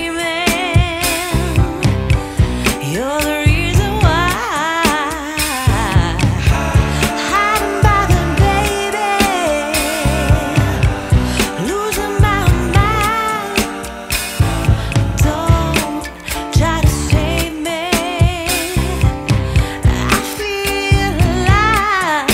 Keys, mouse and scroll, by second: 2.2 click, 3.6 scroll up 1, 4.8 scroll up 1, 5.6 scroll up 1, 5.6 scroll down 1, 6.3 scroll up 1, 10.2-10.5 scroll down 3, 10.3 scroll up 1, 11.0 scroll down 1.